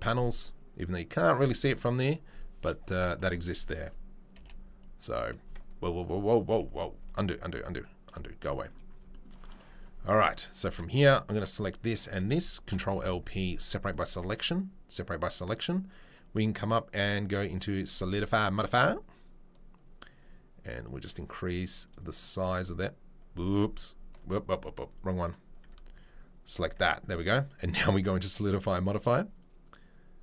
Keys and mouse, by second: 2.4-5.9 middle drag, 4.3 g, 5.9 right click, 6.0-8.8 middle drag, 6.7 ctrl+z, 7.1 ctrl+z, 8.8 right drag, 8.9-9.7 shift+middle drag, 9.7 click, 10.0 drag, 12.7 ctrl+l, 12.9 p, 15.1 middle click, 17.5-24.9 right drag, 24.9 middle click, 25.1 right click, 25.6 Tab, 26.0 middle click, 26.5 Tab, 27.0 right drag, 27.1 middle drag, 29.4 Tab, 29.4-30.2 right drag.